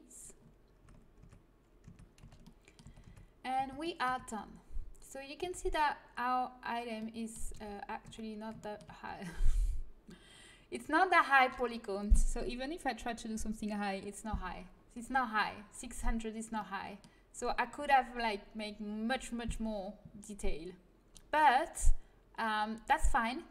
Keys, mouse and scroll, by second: 0.7 Tab, 1.1 Tab, 1.8 Tab, 2.1 z, 2.8 z, 3.0 Tab, 3.5 z, 4.0 Tab, 5.3 Tab, 7.4 a, 8.0 z, 15.1-19.2 middle drag, 20.5-23.5 middle drag.